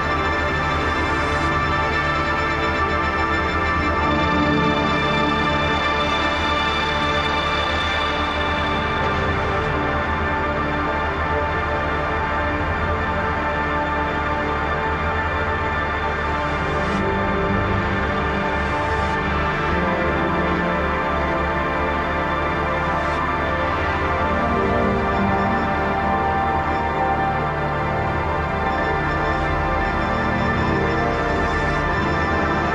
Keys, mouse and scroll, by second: 0.4 Left, 0.4 typing, 2.0-3.3 drag, 3.3 click, 4.1 ctrl+r, 4.8-6.0 drag, 6.8-11.3 shift+drag, 11.3 right click, 11.8 click, 16.2-19.3 alt+shift+drag, 21.2-26.1 drag, 26.1 Up, 26.8 Return, 27.4 click, 28.6-29.5 typing, 29.5 click, 30.2-31.7 shift+drag.